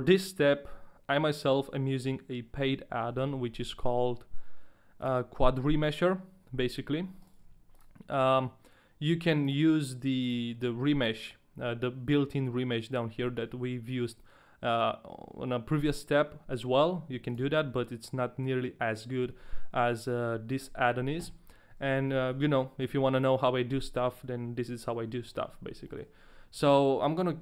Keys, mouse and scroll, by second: 3.2 n, 5.0 click, 7.0 a, 7.2 right click, 7.6 click, 7.6 right click, 7.6 a, 9.4 click, 10.6 click, 17.3 click, 24.8 middle click, 25.0-25.7 scroll down 2, 25.5 middle click, 25.5 scroll up 1, 26.0 shift+middle click, 26.0-27.4 scroll down 1.